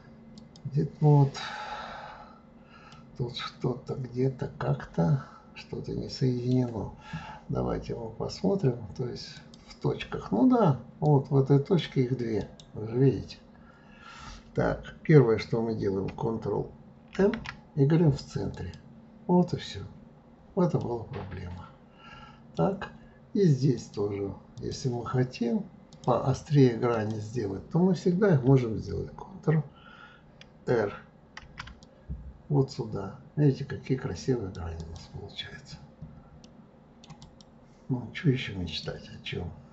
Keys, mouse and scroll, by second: 1.5-2.9 scroll up 4, 2.9-5.9 middle drag, 9.3 click, 11.0-12.4 drag, 12.4-15.4 right drag, 17.2 alt+m, 20.0-20.8 scroll down 2, 20.8-23.8 middle drag, 23.8-24.8 drag, 25.9 click, 26.9 click, 31.4 ctrl+r, 35.4-36.5 scroll down 6, 36.5 middle click, 37.2 click, 38.7-39.7 drag.